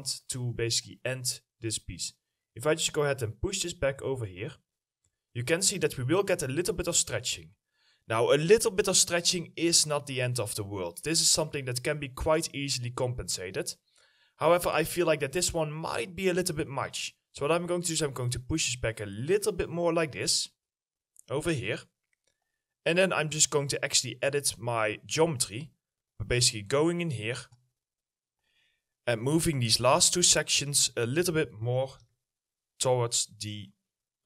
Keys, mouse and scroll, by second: 10.5 middle click, 11.3 alt+middle click, 22.4 right click, 31.3 q, 31.5 middle click.